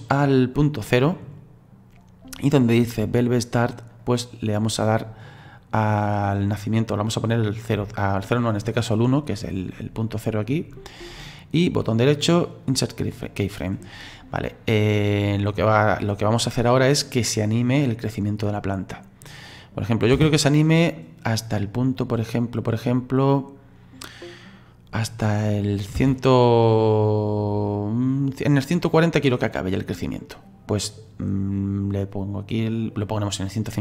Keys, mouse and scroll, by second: 4.0-5.4 right drag, 5.4 click, 6.1-9.1 drag, 11.8-14.5 right drag, 14.5-17.5 drag, 19.6 click, 20.1 space, 26.0 space, 26.8-29.8 drag, 31.3-33.8 drag.